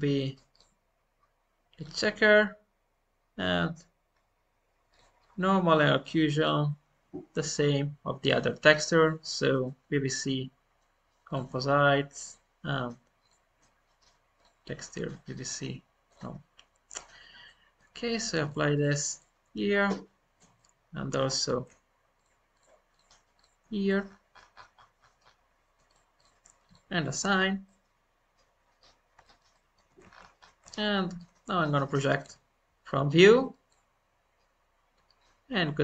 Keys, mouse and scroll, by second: 4.0-4.8 scroll down 1, 4.8-17.4 drag, 17.4 middle click, 18.0-20.4 drag, 20.5 middle click, 21.2 scroll down 1, 22.1-23.5 shift+drag, 24.0-24.3 scroll up 3, 25.1-25.8 scroll up 7, 25.8 click, 27.3 scroll down 1, 27.6-30.0 middle drag, 30.0-31.3 shift+scroll up 4, 30.7 shift+middle click, 31.3-32.1 scroll up 1, 32.1 u.